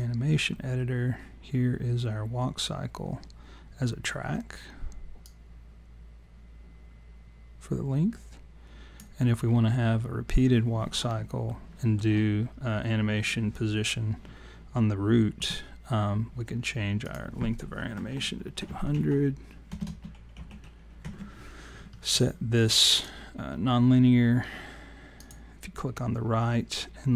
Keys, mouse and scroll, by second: 5.3 click, 9.5-10.7 scroll down 14, 11.5 alt+middle click, 17.0 click, 19.8 BackSpace, 22.9 click, 25.2 click.